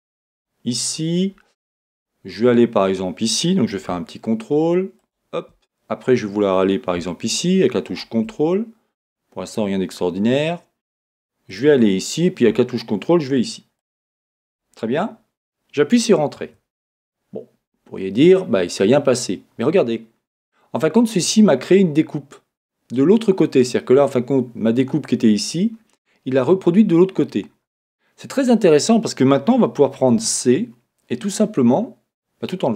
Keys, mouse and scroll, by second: 16.5 Return, 19.7-29.8 middle drag, 27.2-27.7 scroll down 1, 30.2 c.